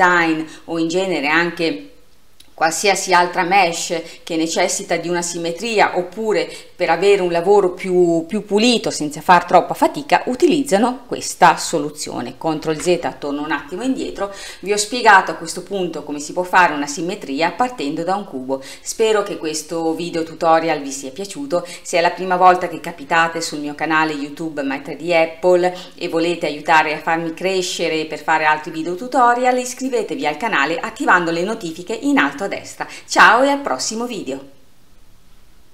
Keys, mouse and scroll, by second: 12.7 ctrl+z.